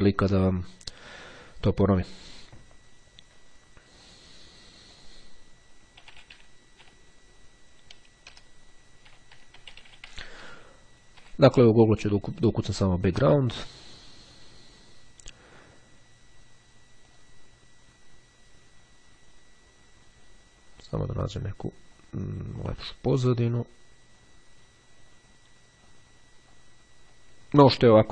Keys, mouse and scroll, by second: 5.0 click, 5.3-8.0 typing, 9.8 o, 10.2 n, 11.0 d, 11.3 Return, 17.2 click, 18.9-19.5 scroll down 1, 19.6-21.9 scroll down 1, 23.4-24.0 scroll down 1, 24.2-24.8 scroll down 1, 25.1-25.7 scroll down 1, 25.9-26.4 scroll down 1, 26.4-27.1 scroll down 1.